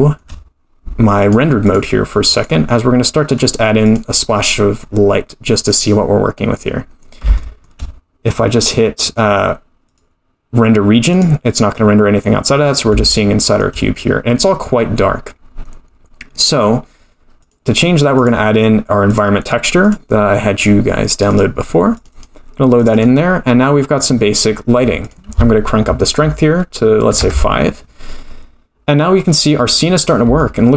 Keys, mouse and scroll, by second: 1.2 click, 1.6 click, 3.3 click, 4.6-5.4 scroll down 4, 5.4 scroll down 1, 5.7 click, 7.0 scroll down 1, 7.4 shift+middle click, 9.0 click, 9.9 click, 11.1 click, 12.1-12.4 scroll up 1, 12.7 scroll down 1, 13.2 shift+middle click, 17.4 click, 18.2 click, 19.8 click, 25.0 click, 29.6-30.2 scroll up 3, 30.4 shift+middle click.